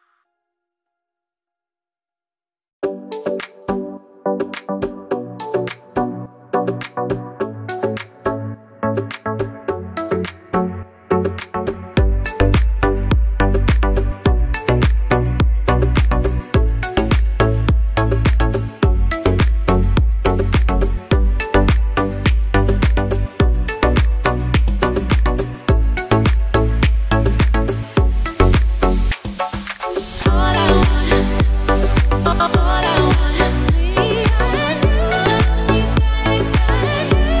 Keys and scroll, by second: 26.4 ctrl+d, 34.4 ctrl+d.